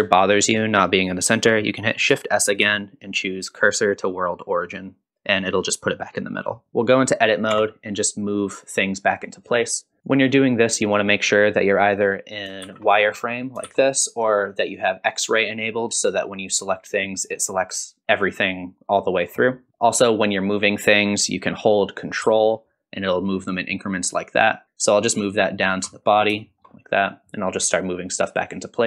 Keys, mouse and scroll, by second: 2.6 shift+s, 5.5 click, 6.2-6.6 scroll down 2, 6.6 middle click, 6.7 click, 7.5 Tab, 8.3-9.6 drag, 10.0 shift+z, 10.0 click, 12.6 shift+z, 13.7 shift+z, 14.7 click, 15.6 click, 16.7 middle click, 19.7 shift+middle click, 19.7 scroll up 1, 19.7 KP_1, 20.0-25.8 drag, 24.6 scroll up 2, 26.1 scroll down 2, 26.4 shift+middle click, 26.5 click, 26.8 ctrl+click, 26.9 shift+click, 27.0 shift+click, 27.1 click, 27.2 shift+middle click, 27.3 shift+middle click, 27.3 scroll down 1, 27.4 shift+click, 27.6 ctrl+z, 27.7 click, 27.9 click, 28.0 scroll down 1, 28.0 click, 28.1 shift+middle click, 28.1 scroll down 3, 28.4 shift+click, 28.5 ctrl+click, 28.7 click, 28.8 scroll up 3.